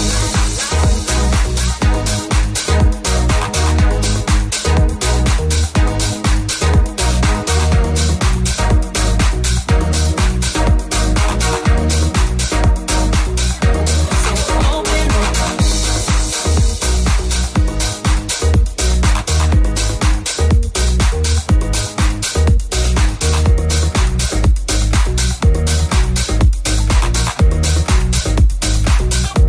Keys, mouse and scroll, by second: 2.8 click, 2.8 right click, 3.7 right click, 4.6 Tab, 5.7 shift+middle click, 5.7 Tab, 6.0 3, 6.1 right click, 6.2 shift+middle click, 6.4 right click, 6.4 middle click, 6.6 right click, 6.6-12.2 middle drag, 12.2 right click, 12.2 1, 12.3 shift+middle click, 12.6 right click, 12.7 middle click, 12.9 right click, 13.0 middle click, 13.3 right click, 13.3-15.6 middle drag, 15.6 right click, 15.6 g, 15.6-16.8 middle drag, 15.9 g, 16.8 right click, 16.8 middle click, 17.1 right click, 17.1-18.5 middle drag, 18.5 right click, 18.5 g, 18.6 middle click, 19.5 shift+click, 19.5 shift+middle click, 19.7 shift+right click, 19.8 shift+middle click, 20.6 right click, 20.6-21.9 middle drag, 21.0 g, 21.9 right click, 21.9-23.2 middle drag, 23.2 right click, 23.2 g, 23.2 middle click, 23.5 right click, 23.6-24.9 middle drag, 24.9 right click, 24.9 g, 24.9-26.1 middle drag, 26.0 g, 26.1 right click, 26.1-27.4 middle drag, 27.4 right click, 27.4 g, 27.5-28.6 middle drag, 28.6 right click, 28.6 g, 28.6-29.4 middle drag.